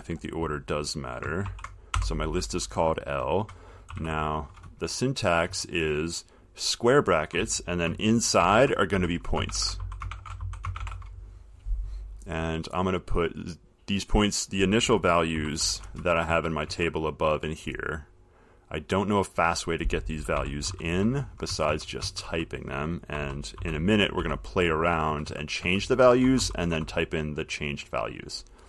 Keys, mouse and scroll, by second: 1.7-2.2 typing, 3.9-4.6 typing, 5.7 Left, 8.6-11.0 typing, 12.0 typing, 14.0 click, 14.8-16.5 typing, 16.9 Right, 19.2 click, 20.3-21.7 typing, 23.1-25.3 typing.